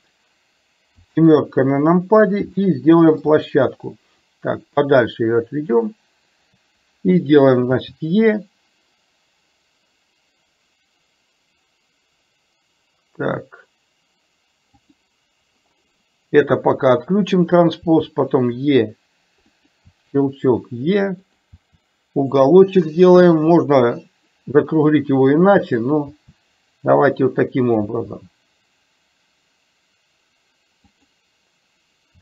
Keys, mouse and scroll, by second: 1.1 KP_7, 2.6 shift+middle click, 4.4-5.8 drag, 7.8 e, 16.9 click, 18.0 e, 19.9 e, 26.3 e, 27.9 e.